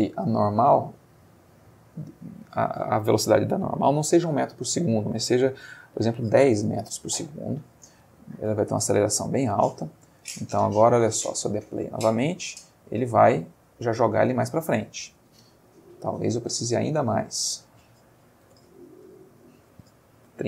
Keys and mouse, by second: 1.7 click, 6.3 1, 6.6 Return, 8.4-10.1 drag, 10.3 space, 14.3 Escape, 16.5 middle click, 17.3 click, 18.4-20.4 typing.